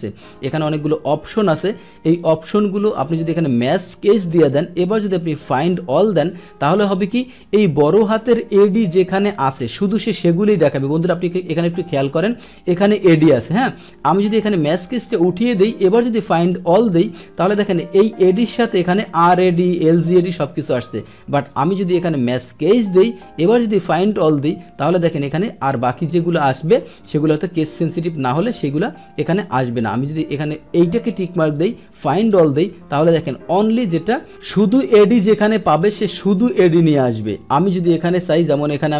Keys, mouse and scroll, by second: 0.3 click, 1.6 click, 3.6 click, 5.7 click, 14.7 click, 15.8 click, 21.5 click, 22.2 click, 23.5 click, 28.8 click, 31.5 click, 32.9-37.8 middle drag, 37.8 click.